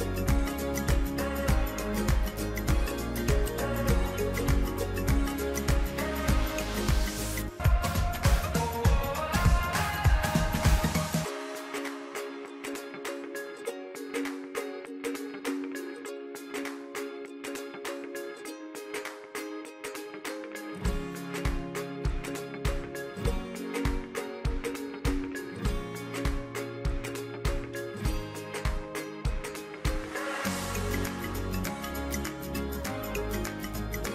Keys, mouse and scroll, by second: 8.1 click, 21.0 click, 24.9 click, 30.4 click.